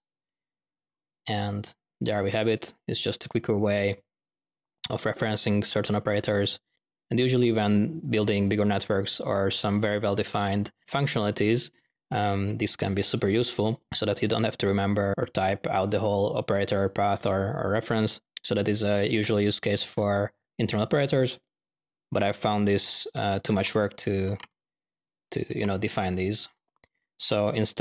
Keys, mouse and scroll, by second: 0.6 middle click, 1.1 middle click, 1.9 click, 2.3 click, 2.5-4.0 drag, 4.2 click, 8.1-8.9 typing, 15.9 middle click, 19.9-20.5 middle drag, 20.2-21.9 typing, 22.7-23.2 drag, 23.7-24.1 drag, 25.0 click, 27.7-27.8 drag.